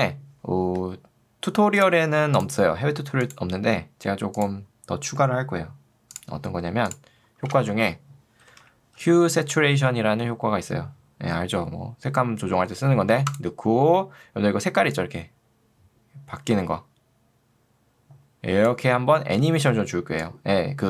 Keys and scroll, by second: 7.5 ctrl+space, 8.5 h, 19.3 ctrl+z.